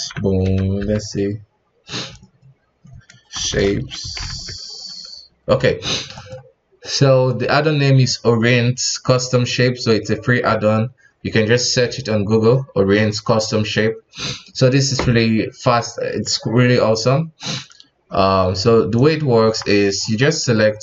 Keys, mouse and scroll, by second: 19.4 KP_1, 20.0-20.5 middle drag, 20.5 right click.